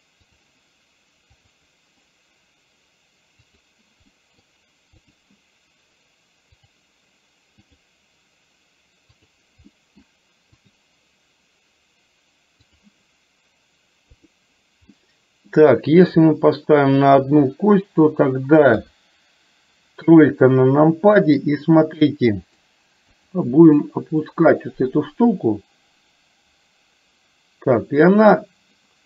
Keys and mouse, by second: 0.3 click, 3.7 drag, 4.2 middle drag, 6.7 click, 9.3 click, 9.8 middle drag, 10.7 click, 12.7 click, 14.3 click, 15.0-15.5 middle drag, 18.8 KP_3, 22.2 middle click, 23.3 click, 24.4-29.0 drag.